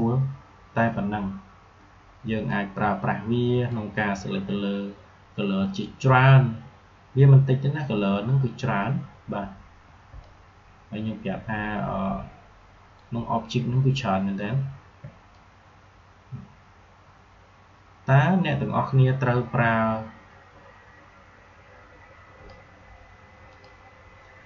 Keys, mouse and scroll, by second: 2.4-7.6 drag, 10.0 shift+Num_Lock, 10.0-23.4 drag.